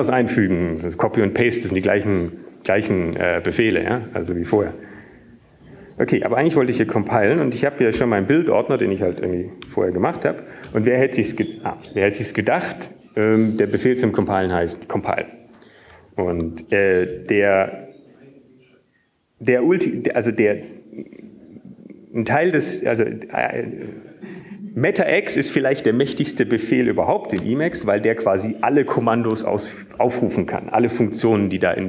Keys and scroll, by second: 1.5 typing, 8.1-10.3 typing, 11.8 typing, 19.2 alt+x, 30.2 ctrl+g, 31.2 alt+x.